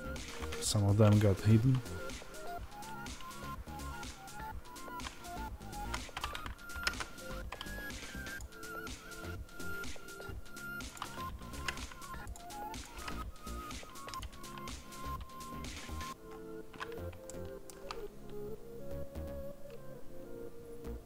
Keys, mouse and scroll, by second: 8.3 click, 17.2-21.0 shift+middle drag.